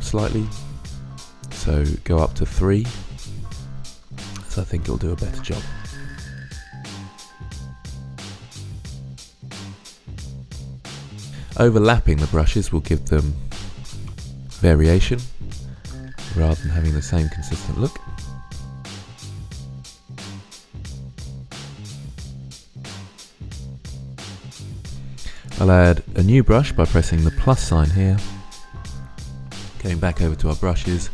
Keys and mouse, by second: 2.2-4.3 drag, 6.3-6.9 drag, 7.7-8.3 drag, 9.6-10.2 drag, 10.3-10.7 middle drag, 11.4-13.4 middle drag, 15.9-16.5 middle drag, 17.8-18.6 drag, 19.2-20.1 drag, 20.4-20.7 drag, 20.7-21.5 middle drag, 21.5 drag, 21.7-22.4 middle drag, 22.4 click, 22.7-23.1 drag, 23.7-24.1 middle drag, 24.1 click, 24.5 middle drag, 27.7 click.